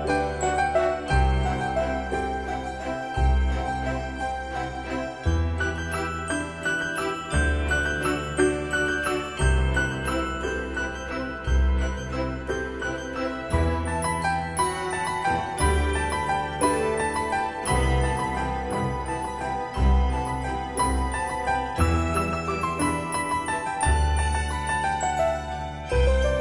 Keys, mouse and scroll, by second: 1.8 click, 7.1 typing, 8.4-9.1 typing, 9.4 Return, 10.9 shift+middle click, 13.1-15.3 drag, 15.5-16.4 scroll up 1, 18.8-19.3 scroll up 1, 19.8 scroll down 1, 22.4 middle click, 23.6-24.1 scroll up 1.